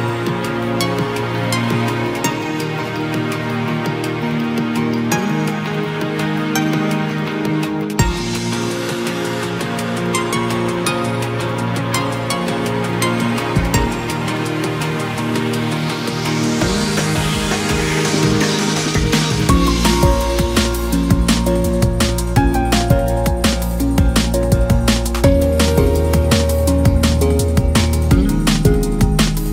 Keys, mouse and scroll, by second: 0.5 click, 2.0-2.5 scroll down 2, 2.5 KP_1, 3.9-4.4 scroll down 2, 4.5-5.1 scroll up 2, 5.1 typing, 5.7 click, 6.2 shift+click, 7.0 shift+click, 7.6 shift+click, 8.7 click, 9.4-11.1 right drag, 11.1-11.7 scroll down 2, 11.7-12.4 scroll up 2, 12.4 click, 13.1 shift+drag, 13.9 shift+click, 14.5 shift+click, 15.0 right click, 16.3-17.2 scroll up 1, 17.2 click, 18.4 g, 19.6 click, 19.9 g, 21.4 click, 21.6 g, 22.8-23.6 scroll down 2, 23.6 KP_3, 24.4-25.4 scroll up 1, 25.4 ctrl+r, 27.7 click, 29.3 r.